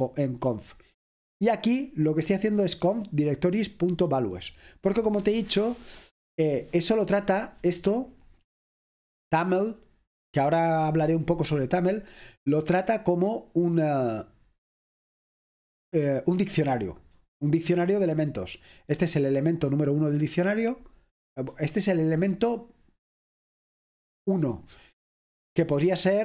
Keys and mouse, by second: 0.0 click, 2.6-4.8 drag, 12.6-16.6 drag, 17.4 click, 18.9-20.6 drag, 24.8 click.